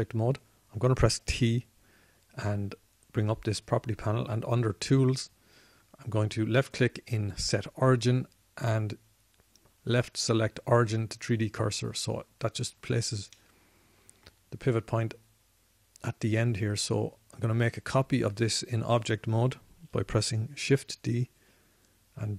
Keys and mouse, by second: 2.5 t, 22.1 shift+d.